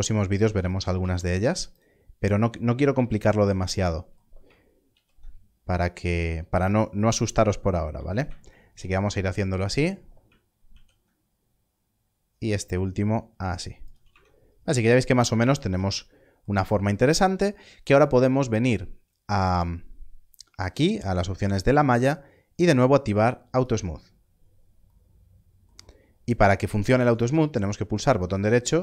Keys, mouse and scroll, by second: 0.6 click, 2.3 scroll up 1, 3.3 alt+click, 4.8 ctrl+b, 7.6 ctrl+b, 9.6 click, 10.7 ctrl+b, 13.8 ctrl+b, 14.0 click, 14.0 Tab, 14.3 scroll down 1, 16.5 scroll down 1, 17.3 scroll up 1, 23.5-24.8 scroll up 1, 24.8 click, 27.0 click.